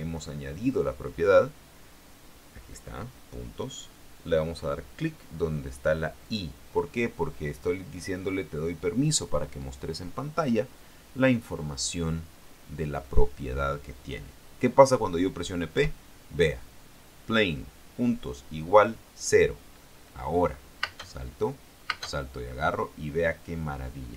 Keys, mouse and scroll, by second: 6.4 click, 15.9 p, 21.1 space, 22.1 space.